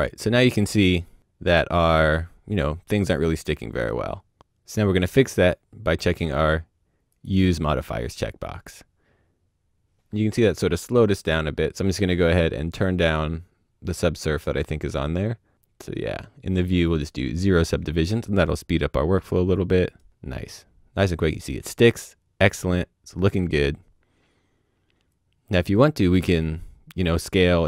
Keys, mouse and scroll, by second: 3.5 right click, 3.7 middle click, 4.3 scroll down 1, 4.4 click, 7.1 click, 11.7 click, 13.9 click, 15.3 click, 16.8 click, 19.0 right click, 25.1 click.